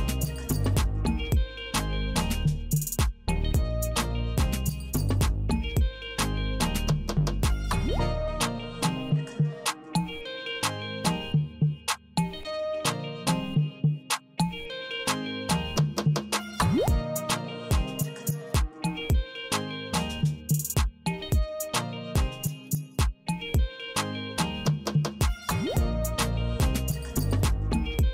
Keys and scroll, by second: 0.2 m, 1.7 Right, 3.7 w, 5.1 Right, 7.1 alt+e, 8.7 n, 10.7 k, 13.9 Return, 15.9 Tab, 17.6 alt+e, 19.5 n, 21.5 d.